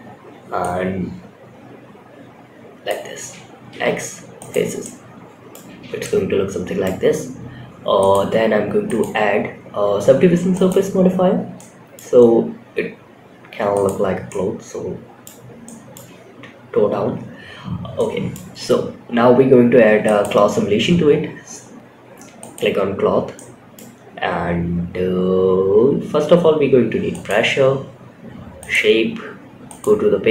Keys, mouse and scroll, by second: 3.0 x, 4.1 scroll up 1, 4.1 middle click, 5.0 Tab, 5.3 middle click, 7.3 click, 8.2-10.4 drag, 10.9 scroll up 1, 10.9-11.3 middle drag, 11.5 scroll up 1, 13.0 click, 13.6 middle click, 14.8 scroll down 1, 15.0-15.3 middle drag, 16.8 scroll down 2, 17.3-17.6 middle drag, 19.4 click, 21.7-22.6 drag, 22.7 middle click, 23.6-25.5 scroll down 10, 25.5 scroll up 1, 26.8 click, 26.8-27.9 scroll down 2, 27.9 click, 28.2-28.6 scroll down 2, 29.0-30.3 drag.